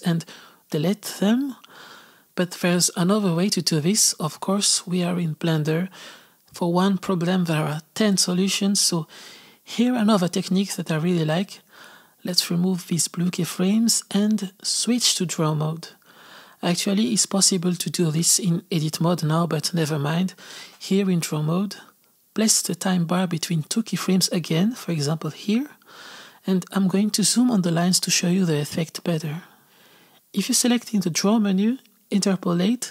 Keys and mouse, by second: 0.1-1.1 drag, 1.5 x, 2.1 click, 2.6 x, 3.1-5.2 drag, 8.6-12.5 drag, 13.5 x, 14.8 click, 15.4-25.3 drag, 26.5-30.7 middle drag, 30.7-32.9 drag.